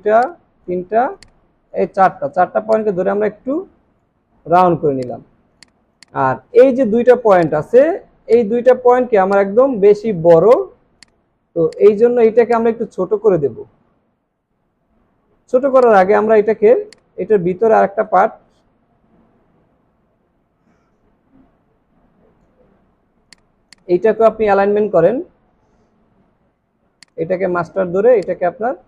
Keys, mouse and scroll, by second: 5.9 space, 12.2 alt+scroll up 1, 18.1 space.